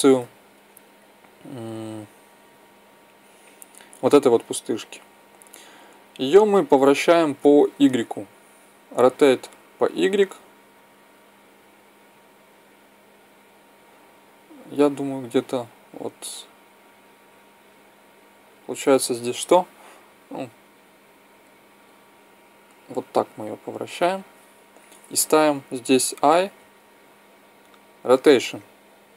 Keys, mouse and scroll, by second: 5.5 right click, 8.9 r, 26.0 i.